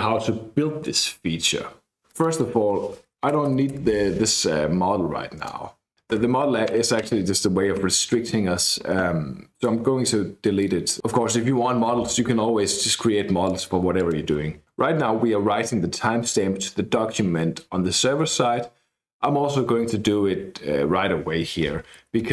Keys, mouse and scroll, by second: 2.1 click, 3.3 BackSpace, 3.4 BackSpace, 3.7 BackSpace, 5.3 click, 6.0 KP_Enter, 9.4-10.5 scroll down 1, 10.5 click, 11.0-12.2 scroll up 1, 12.2-12.9 scroll down 2, 13.4 click, 13.9 click, 21.8-22.3 typing.